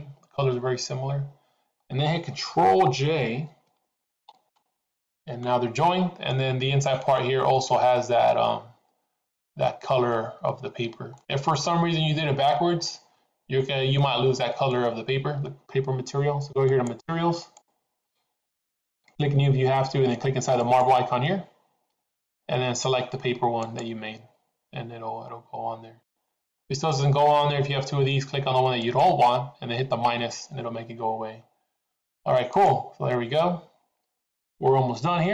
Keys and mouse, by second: 5.0 ctrl+j, 6.5-7.3 middle drag, 11.2 middle click, 12.9-14.1 middle drag, 14.3 middle click, 16.8 click, 21.1-24.6 drag, 26.1 middle click, 28.8 click, 32.5 click.